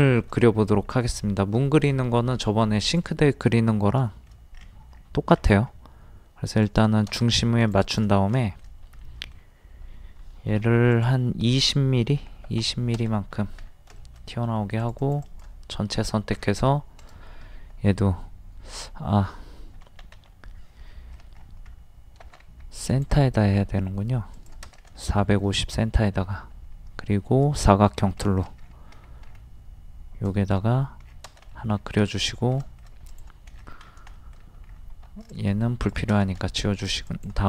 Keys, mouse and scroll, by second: 0.1 shift+middle click, 2.8 click, 4.1 shift+middle click, 4.6 scroll up 1, 6.6 click, 8.4 shift+middle click, 8.9-9.4 scroll up 1, 9.4-9.8 scroll down 1, 10.6 p, 10.9 click, 12.2 KP_2, 13.3 scroll down 1, 14.3 middle click, 14.8 click, 16.0 middle click, 16.0 scroll down 1, 17.0 right click, 18.9 Escape, 19.8 ctrl+z, 20.2 ctrl+z, 20.9 middle click, 21.3-21.7 scroll up 1, 22.4 t, 22.9 click, 24.9 scroll down 1, 25.1 middle click, 27.5 click, 28.6 scroll up 1, 30.3 click, 31.1-31.4 scroll down 1, 31.5 middle click, 31.8 scroll down 1, 32.6 middle click, 33.1 click, 33.5 middle click, 33.6 scroll down 1, 34.2 shift+middle click, 34.7-35.1 scroll up 1, 35.3 click, 36.9 click.